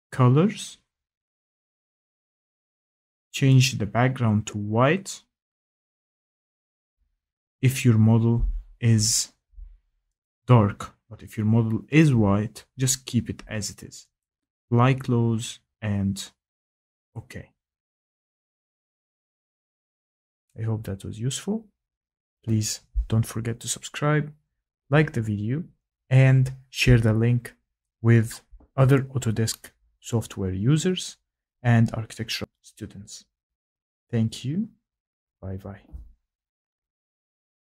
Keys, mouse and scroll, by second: 2.1 click, 4.1 click, 5.6 click, 7.5 click, 9.6 click, 10.8 click, 12.1 click, 13.3 click, 16.1 click, 18.9 right click, 20.8 click, 25.0 click, 25.6 Escape, 27.8 click, 30.1 click, 31.3 click, 32.5 click, 36.6 click.